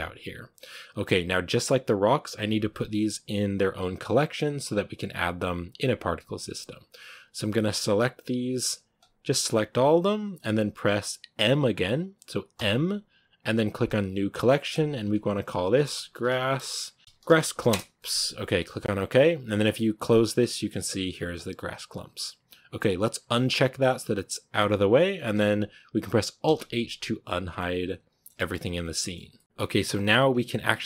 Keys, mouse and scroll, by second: 7.9-9.9 right drag, 10.3-17.6 shift+right drag, 17.6 s, 24.4 click, 25.1-25.8 scroll down 1, 26.3 alt+h, 26.9 a, 27.4-30.2 middle drag, 30.2-30.6 scroll down 3, 30.6-30.8 middle drag.